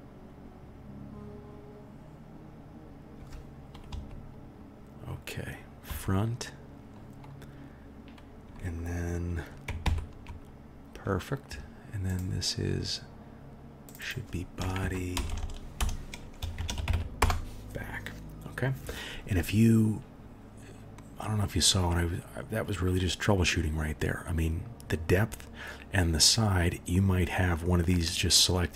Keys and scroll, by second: 3.9 KP_1, 5.8 KP_1, 9.8 KP_1, 15.3 BackSpace, 15.4 BackSpace.